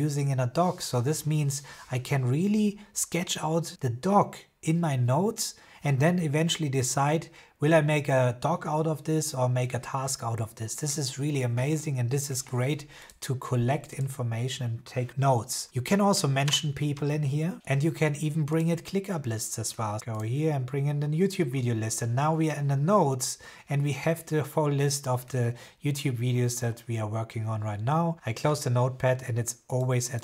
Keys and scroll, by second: 15.0 BackSpace, 15.6 shift+2, 16.3 Return.